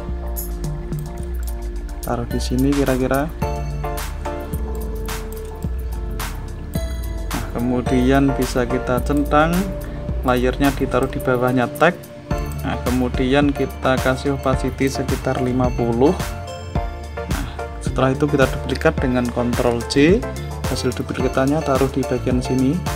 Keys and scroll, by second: 19.2 ctrl+j.